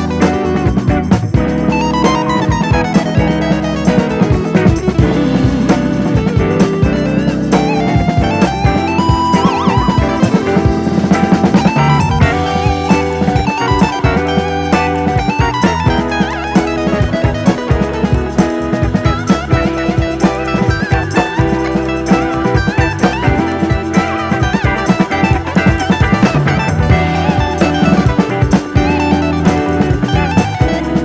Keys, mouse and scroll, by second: 0.7-1.1 scroll up 1, 1.1 shift+middle click, 1.5 s, 2.0 Tab, 2.3 click, 3.0 ctrl+z, 3.7 click, 5.0 g, 6.1-6.4 scroll up 2, 6.4 shift+middle click, 6.8 Tab, 7.3 click, 7.6 alt+/, 7.7-9.2 drag, 9.2-9.8 scroll up 2, 9.5 shift+middle click, 9.8 click, 11.5 click, 12.1 click, 12.7 s, 14.7 Delete, 15.6 /, 15.8 scroll down 1, 15.9 middle click, 16.3 alt+/, 16.5 scroll down 1, 16.7 middle click, 17.2 KP_3, 17.5-18.5 scroll up 1, 18.7 alt+/, 18.9 click, 19.7 s, 20.4 click, 22.4 ctrl+r, 24.2 click, 24.4-25.4 drag, 25.4 alt+e, 28.2-29.2 drag, 29.5 click, 29.7 click, 30.5 s.